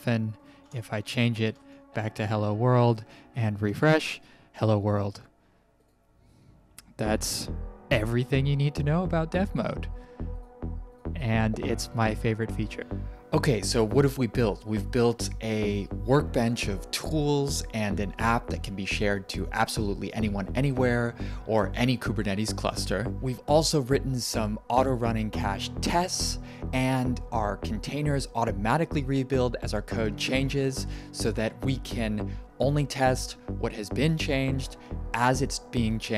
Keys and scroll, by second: 0.5-1.9 typing, 2.1 alt+Escape, 2.8 ctrl+r.